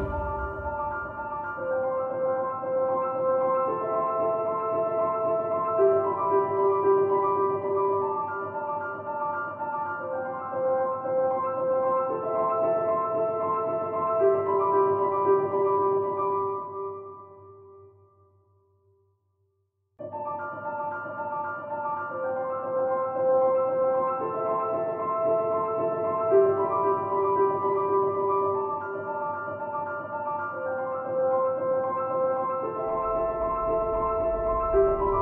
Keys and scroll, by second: 17.1 ctrl+v.